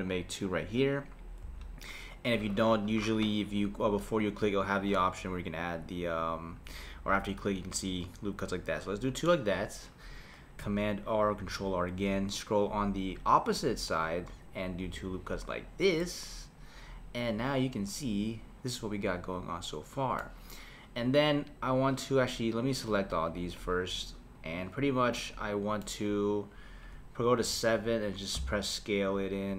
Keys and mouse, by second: 4.2-9.2 drag, 11.4 r, 16.0-19.0 middle drag, 22.6-23.7 drag, 25.2-27.4 middle drag, 27.4 KP_7, 28.4 s.